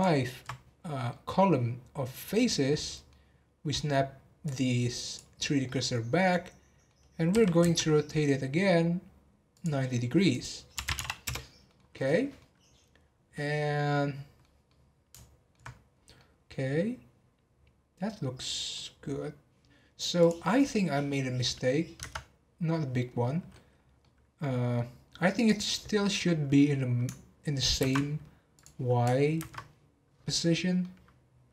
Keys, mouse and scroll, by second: 1.1-4.4 middle drag, 4.4 click, 5.3 scroll down 2, 5.6-7.3 middle drag, 7.3 r, 10.3-11.6 drag, 11.6 middle click, 11.7 scroll down 1, 11.9-12.6 middle drag, 12.6 scroll up 2, 13.0 scroll down 2, 13.3-15.9 middle drag, 15.9 scroll down 2, 16.1-18.9 middle drag, 18.9 scroll up 4, 20.1 click, 20.5-22.0 middle drag, 22.0 Tab, 22.5 scroll down 1, 22.7-23.7 middle drag, 23.7 scroll down 1, 24.0-24.7 middle drag, 24.7 scroll up 2, 25.0 scroll down 3, 25.3 click, 27.8 ctrl+c, 28.5 click, 29.4 ctrl+v, 30.8-31.5 middle drag.